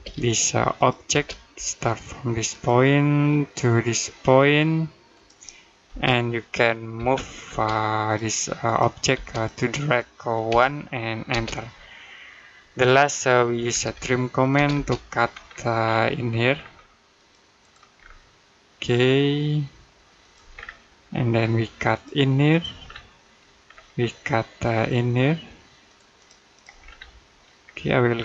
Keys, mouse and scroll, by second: 0.1 click, 0.9 space, 2.3 click, 5.7 space, 6.8 m, 7.3 space, 7.9 click, 9.0 space, 9.1 click, 10.3 1, 11.1 space, 12.8-13.2 scroll down 1, 13.2 middle click, 13.5-14.4 typing, 15.1-15.6 scroll up 1, 15.6-16.0 scroll down 1, 16.0 middle click, 16.4-17.0 scroll up 1, 17.0 click, 17.8-18.5 scroll up 1, 20.0 click, 20.3-20.7 scroll down 1, 20.7 middle click, 21.2-21.7 scroll up 1, 21.7 click, 22.7-23.0 scroll down 1, 23.0 middle click, 23.5-23.8 scroll up 1, 25.7 click, 26.6-27.1 scroll down 1, 27.1 middle click, 27.5-28.1 scroll up 1, 28.1 click.